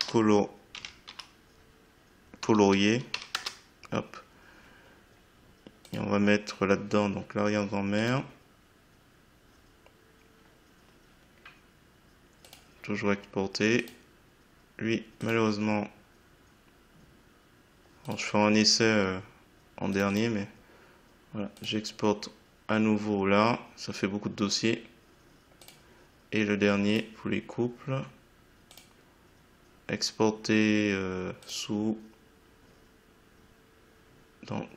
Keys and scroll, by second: 2.4 2, 3.1 s, 3.3 Return.